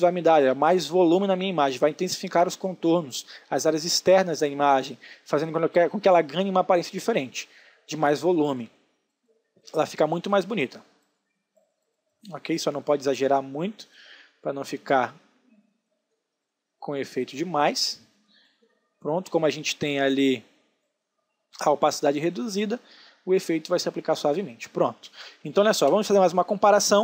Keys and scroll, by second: 24.6 ctrl+alt+space.